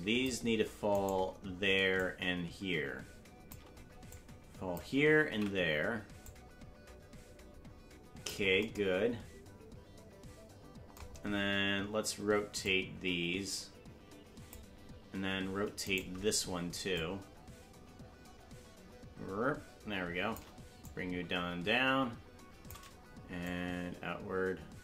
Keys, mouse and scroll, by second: 1.2 right click, 2.0-3.5 shift+drag, 4.1 click, 5.8 ctrl+z, 6.2-8.3 drag, 12.6-14.5 drag, 16.1 right click, 16.9-20.4 shift+drag, 20.8-22.7 drag, 23.4-24.8 shift+drag.